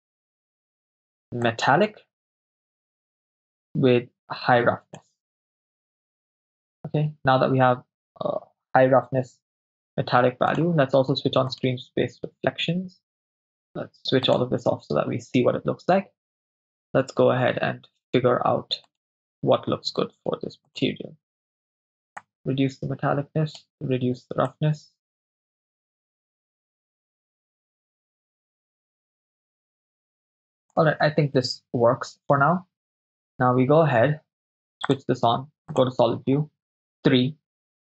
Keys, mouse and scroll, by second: 1.5-2.9 drag, 3.7-5.0 drag, 6.0 KP_0, 10.5 click, 11.7 drag, 14.4 click, 19.0 right click, 20.7 click, 22.2-23.7 drag, 24.6 click, 25.4 click, 25.7 click, 26.2 click, 27.2 click, 32.8 KP_0, 34.9 drag, 35.8-36.9 drag, 36.9 KP_3.